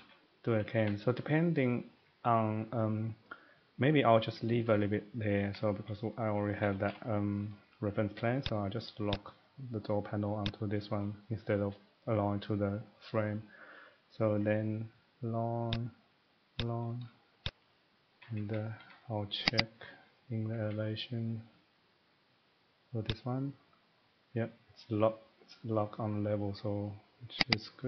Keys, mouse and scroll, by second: 0.0-0.5 typing, 0.7 Escape, 0.8 Escape, 1.2 middle click, 2.0 middle click, 3.0 middle click, 5.4 Escape, 5.7 middle click, 6.5 middle click, 6.6 typing, 7.5 middle click, 8.4 click, 9.1 click, 10.4 click, 12.8 middle click, 13.1 middle click, 14.0 scroll, 14.1 scroll down 2, 14.4-14.9 scroll, 15.7 click, 16.6 click, 17.5 click, 17.9 scroll, 18.1 Escape, 18.4 Escape, 18.5 Escape, 18.7 middle click, 18.8 Escape, 19.5 click, 19.7 click, 20.3 middle click, 20.5 Escape, 20.6 Escape, 23.1 click, 26.6 click, 27.4 click.